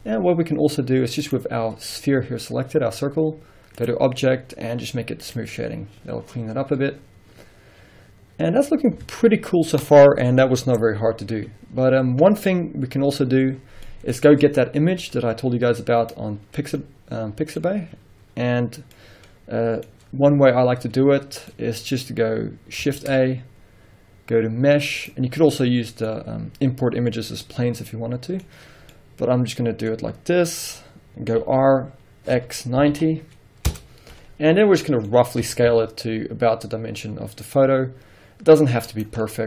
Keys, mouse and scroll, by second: 1.3 click, 3.8-14.0 drag, 7.4 scroll down 2, 8.7-9.2 scroll up 1, 9.2 alt+a, 13.7 scroll down 1, 14.0-14.7 middle drag, 14.4 scroll down 1, 15.1 z, 16.6 scroll down 1, 16.9 middle click, 20.1-21.6 scroll up 1, 21.6 middle click, 23.0 shift+a, 25.6 middle click, 30.0 scroll up 1, 31.6 r, 33.9 Return, 34.8 middle click, 35.5 s, 39.2 click, 39.3 scroll up 1.